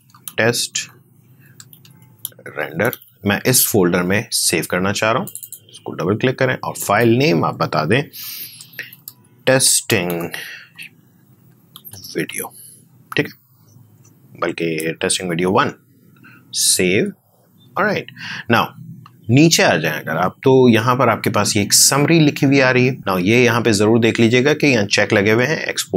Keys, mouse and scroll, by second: 0.0-3.3 typing, 8.1-12.7 typing, 14.7 space, 15.1 1, 16.5 click.